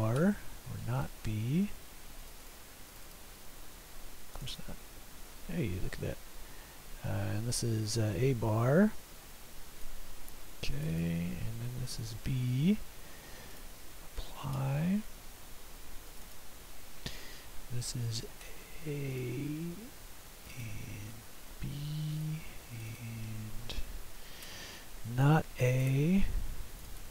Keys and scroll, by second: 8.0 typing, 12.0 b, 13.8 typing, 18.0 typing, 21.1 b, 24.5 /.